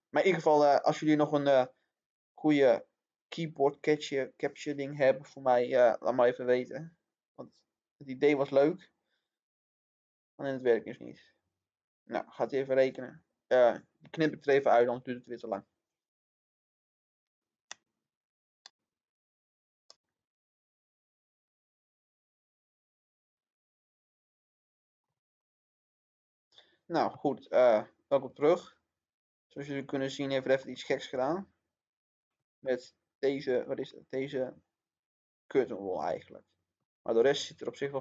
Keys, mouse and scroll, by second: 19.6 middle click, 21.9 scroll up 1, 23.1-25.4 middle drag, 26.5 scroll down 1, 27.1-30.7 middle drag, 30.7 scroll down 1, 33.1 middle click, 34.1 scroll up 1, 35.9 scroll down 1, 36.7-38.0 middle drag.